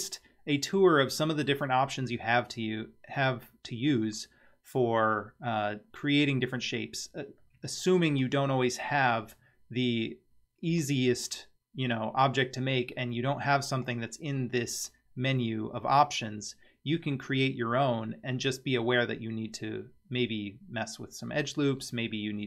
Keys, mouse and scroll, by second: 13.8-19.4 drag.